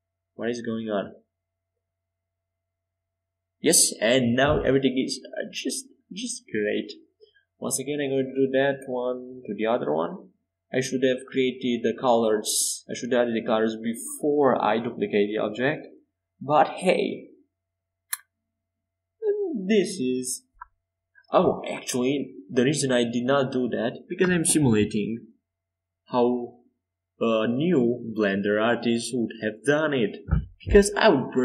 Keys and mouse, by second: 0.2 right click, 0.6-2.9 middle drag, 2.9-4.6 drag, 3.9 middle click, 4.6 Tab, 6.5-7.9 middle drag, 7.0 Tab, 7.9 z, 9.3 KP_5, 9.5 KP_7, 10.0 KP_1, 11.1 KP_5, 13.0 a, 13.9 c, 23.8-28.1 drag, 29.0-31.4 drag, 30.4 Tab.